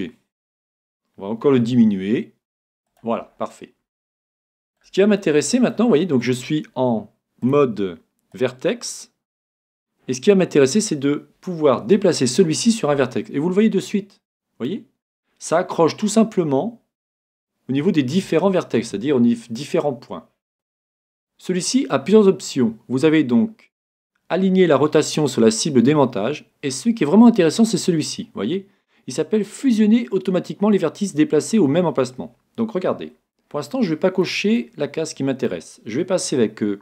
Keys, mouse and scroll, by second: 0.6-2.4 drag, 1.7 s, 3.1-4.9 drag, 3.4-7.1 middle drag, 7.4-9.3 drag, 11.9 g, 33.7-36.8 middle drag.